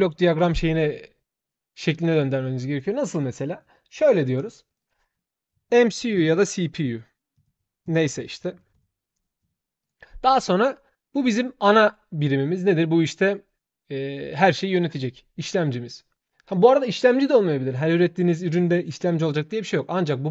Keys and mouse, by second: 1.9 click, 3.3 shift+click, 4.4 shift+click, 4.6 shift+click, 16.3 shift+click, 19.0-20.3 shift+drag.